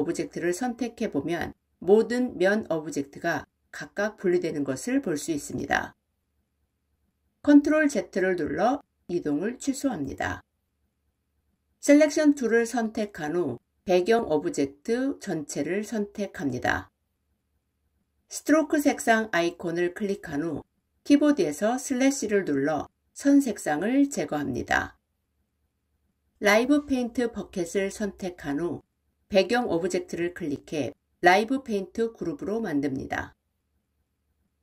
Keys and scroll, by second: 7.4 ctrl+z, 13.8 ctrl+a, 21.1 /.